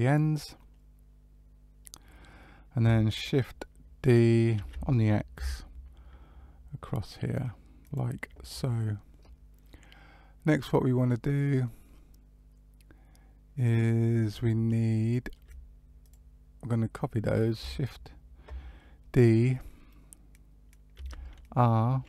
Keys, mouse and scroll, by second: 0.5 middle click, 4.5 shift+d, 14.9 shift+middle click, 15.9 click, 16.5-17.5 scroll down 1, 20.9 shift+d.